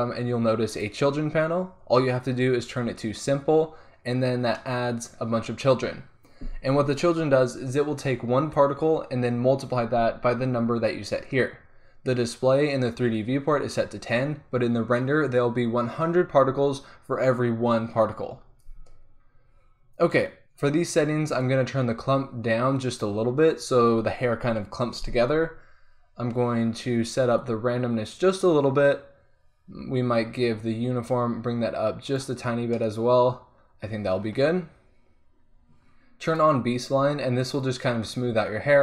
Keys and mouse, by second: 0.8-6.2 drag, 6.2 middle click, 21.3 middle click, 21.4-23.2 drag, 27.4-32.7 drag, 32.7-33.7 middle drag, 34.4 click, 34.6-38.6 middle drag.